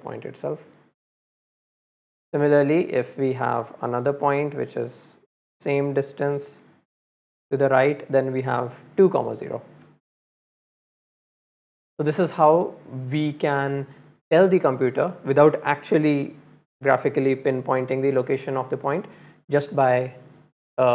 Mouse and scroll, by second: 0.4-1.8 drag, 2.4 click, 2.8 click, 3.8-6.4 drag, 7.9 click, 9.1 click, 11.3-11.7 middle drag, 11.7 scroll up 1, 12.0-12.4 scroll down 1, 12.7-13.2 scroll down 1.